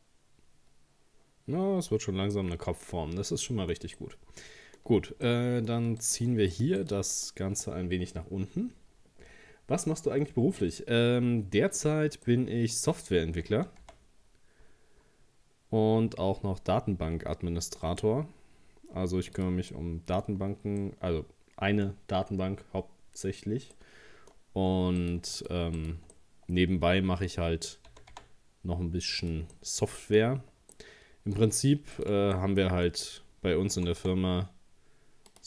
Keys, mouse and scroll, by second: 1.9-2.3 scroll up 2, 2.3-5.0 middle drag, 5.0-5.3 scroll up 1, 5.3 middle click, 6.0 right click, 6.5 shift+right click, 6.8 shift+right click, 7.1 shift+right click, 8.1-8.4 scroll down 2, 11.4 scroll up 1, 12.3-13.5 middle drag, 13.5 g, 19.7 middle click, 20.3-20.8 scroll down 3, 20.8-24.4 middle drag, 24.4-24.8 scroll up 1, 25.0 scroll up 1, 25.0 right click, 25.4 shift+right click, 25.8 shift+right click, 26.1-27.9 middle drag, 27.9 g, 29.5 middle click, 30.4-30.7 scroll down 2, 30.7-32.0 middle drag, 32.0 right click, 32.4-33.8 middle drag, 33.8 g.